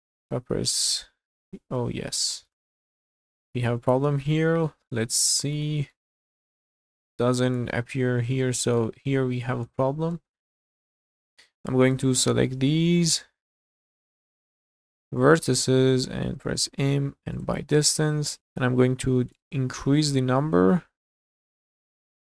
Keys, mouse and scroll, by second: 0.2 a, 1.3-2.0 scroll up 4, 2.3 shift+middle click, 2.6 middle click, 3.4-4.1 scroll down 6, 4.2 shift+middle click, 4.9 shift+middle click, 5.7 middle click, 6.2 scroll up 3, 6.6 shift+middle click, 7.9-8.4 scroll down 3, 8.4 shift+middle click, 8.8 middle click, 9.2-9.7 scroll up 4, 9.8 shift+middle click, 10.4 shift+middle click, 10.5 scroll down 1, 10.8 middle click, 11.4 click, 11.9-14.1 drag, 16.4 m, 19.3-22.3 drag.